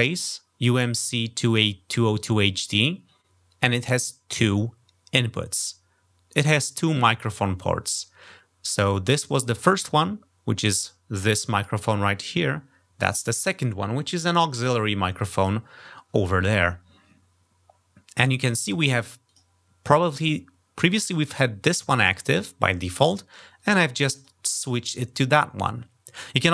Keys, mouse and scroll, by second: 19.1 click, 19.9 click, 23.3 click, 23.9 click.